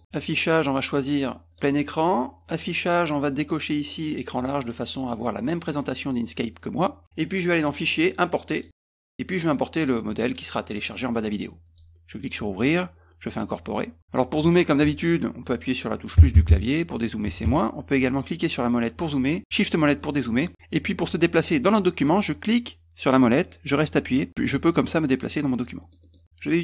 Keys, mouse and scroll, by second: 0.1 click, 1.5 click, 2.4 click, 4.6 click, 7.6 click, 8.5 click, 9.8 click, 11.6 click, 13.3 click, 18.4 middle click, 18.6 middle click, 19.6-20.1 shift+scroll down 4, 22.4-25.3 middle drag, 25.8 middle click, 26.0 middle click.